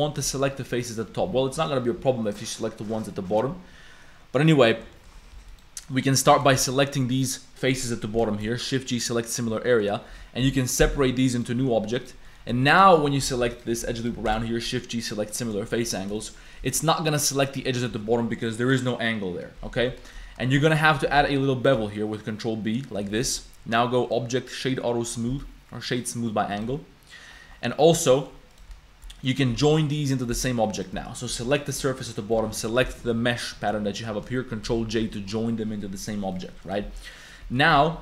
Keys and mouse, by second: 0.5 click, 1.5 click, 2.2 click, 3.1 click, 4.9 shift+click, 5.3 3, 5.5 click, 6.0 click, 6.6 shift+g, 8.4 shift+g, 9.7 click, 10.4 p, 11.0 Tab, 11.3 click, 12.0 click, 12.2 middle click, 12.6 click, 12.7 shift+middle click, 12.9 shift+click, 13.0 middle click, 13.1 Tab, 13.2 2, 13.6 alt+click, 14.0 alt+click, 14.3 shift+g, 15.3 click, 15.7 shift+click, 16.1 shift+click, 16.6 z, 19.8 z, 20.1 shift+middle click, 20.4 shift+middle click, 21.1 ctrl+b, 23.2 Tab, 24.2 click, 25.3 a, 25.4 click, 26.5 click, 27.7 click, 28.1 click, 28.5 click, 29.2 click, 29.6 g, 30.7 shift+click, 31.1 click, 31.3 g, 33.4 click, 34.7 ctrl+j, 35.0 a, 36.3 click, 36.8 Tab, 37.2 click, 37.4 a, 37.7 shift+click, 37.8 Tab.